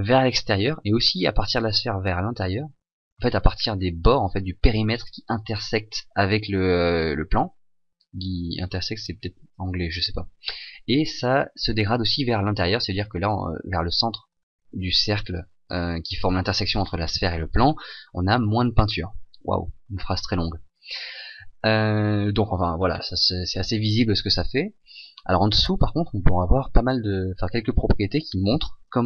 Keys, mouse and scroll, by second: 3.1 e, 3.2 e, 3.5 e, 3.6 e.